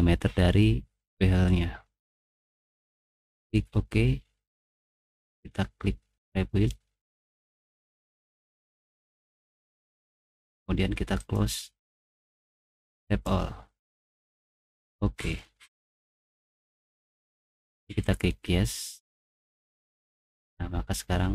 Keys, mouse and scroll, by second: 2.4 middle click, 3.4 click, 6.1 click, 11.2 click, 13.0 click, 14.8 click, 18.1 click, 20.2 middle click.